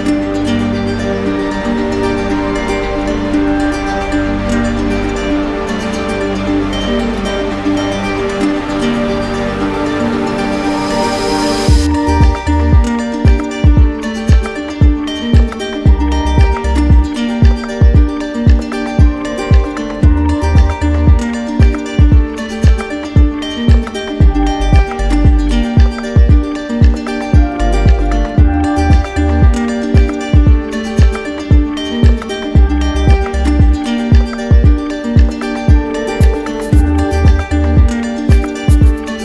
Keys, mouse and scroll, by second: 0.1 shift+click, 2.3 shift+click, 3.0 alt+click, 6.0 shift+click, 6.8 shift+click, 8.1 click, 8.9 d, 9.5 d, 11.2 alt+click, 11.8 d, 22.5 right click, 25.0 shift+right click, 28.0 shift+right click, 29.9 shift+right click, 30.6 shift+click, 31.5 right click, 34.2 shift+click, 35.0 click, 36.1 right click, 36.3 ctrl+z, 36.9 ctrl+z, 37.7 click, 38.4 ctrl+shift+z.